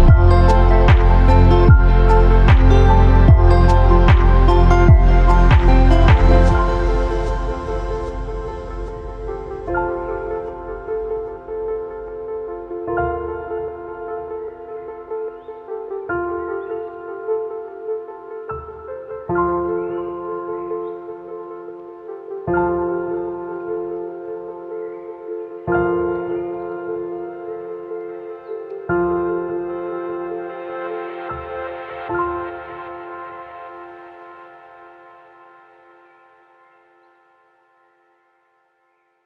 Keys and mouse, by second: 0.2 i, 1.7-2.4 drag, 2.5 click, 2.8 shift+drag, 3.7 i, 4.8-5.6 drag, 6.5 1, 6.8 shift+drag, 7.5 shift+click, 7.8 2, 8.2 f, 8.6 shift+drag, 9.3 1, 9.6 shift+click, 10.0 ctrl+r, 11.2 click, 11.8 f, 11.9 a, 13.1 shift+click, 13.1 f, 13.3 a, 13.4 click, 15.3 f, 15.8 f, 16.1 shift+click, 16.7 click, 17.5 ctrl+r, 20.0 2, 20.3 f, 20.5 f, 20.8 f, 21.6 ctrl+z, 22.3 shift+drag, 22.7 1, 23.1 a, 23.6 ctrl+r, 24.1 a, 25.6 f, 25.8 f, 26.0 a, 26.8 ctrl+z, 27.1 ctrl+z, 29.8 f, 29.8 a, 30.3 Tab, 30.6 ctrl+s, 30.8-31.1 drag, 31.8-32.4 drag, 32.9 shift+drag, 34.0 shift+drag, 35.4 ctrl+KP_1, 36.8-37.4 shift+drag.